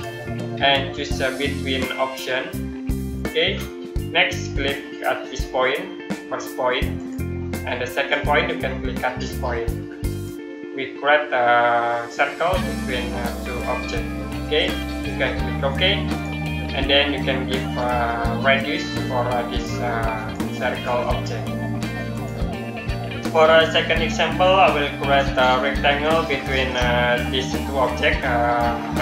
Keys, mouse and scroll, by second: 3.0 click, 6.8 click, 10.0 click, 16.0 click.